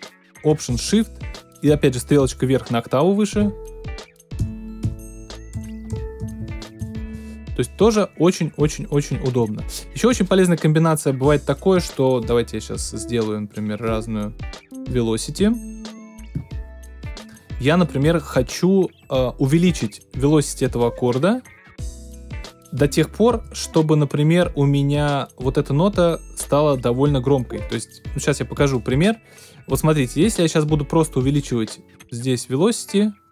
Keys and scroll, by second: 3.4 alt+shift+Up, 4.4 alt+shift+Down, 5.5 alt+shift+Up, 6.2 alt+shift+Down, 6.8 alt+shift+Up.